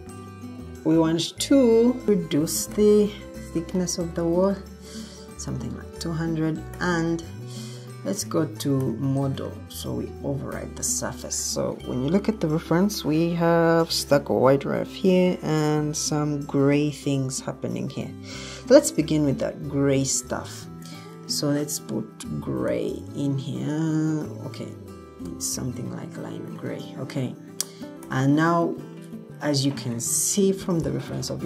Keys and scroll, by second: 2.2-3.3 typing, 22.6 g, 25.2 l.